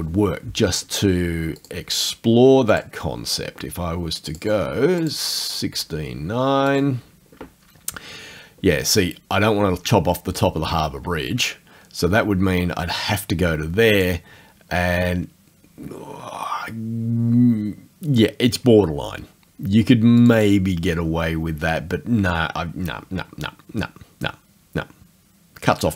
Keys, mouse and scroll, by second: 1.6 click, 2.7 click, 4.3 click, 5.1 click, 6.7 click, 10.4-14.2 drag, 20.2 click.